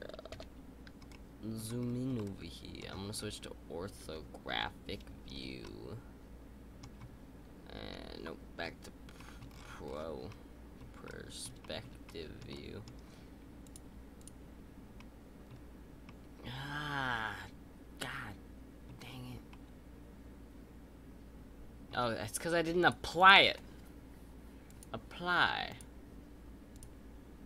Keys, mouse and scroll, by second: 0.3 KP_5, 1.1-1.6 shift+middle drag, 1.6-2.1 scroll up 4, 2.1-3.1 middle drag, 3.1-3.9 scroll up 2, 3.9 KP_5, 5.3 scroll up 3, 5.6-7.7 middle drag, 7.7 KP_5, 8.6-9.1 scroll up 2, 9.1 shift+middle click, 9.4-10.2 scroll down 8, 10.2-13.6 middle drag, 13.6-14.3 drag, 14.9-18.9 shift+middle drag, 18.9-19.5 scroll up 2, 19.5-22.5 middle drag, 23.4-24.8 drag, 25.6-26.8 drag.